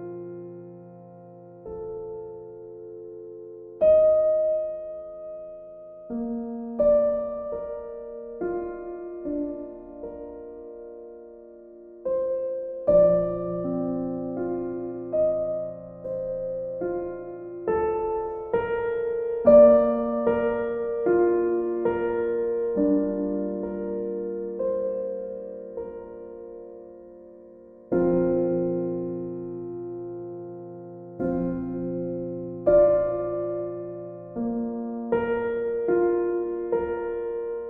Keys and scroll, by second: 9.3 ctrl+z, 17.1 ctrl+z, 30.9 b.